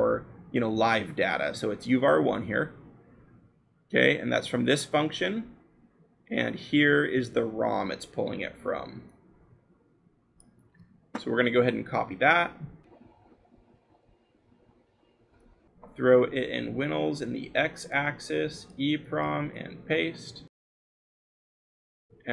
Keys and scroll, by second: 10.5 ctrl+c, 19.4 ctrl+v.